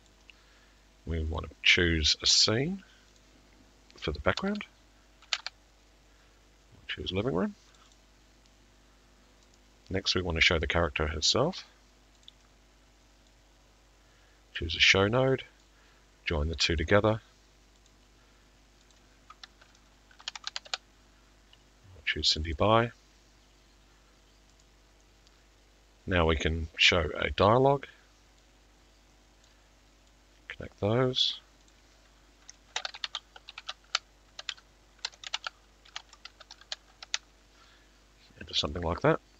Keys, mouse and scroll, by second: 0.1 click, 1.4 click, 3.2 click, 4.3 click, 7.8 typing, 9.6 click, 12.3 middle click, 14.6 click, 16.8 click, 17.9 click, 19.0 click, 19.4 click, 22.4 click, 22.4 typing, 24.7 click, 24.7 right click, 27.5 middle click, 29.5 click, 31.3 click, 32.6 click, 32.8 t, 36.6 typing, 38.7 click, 38.7 typing.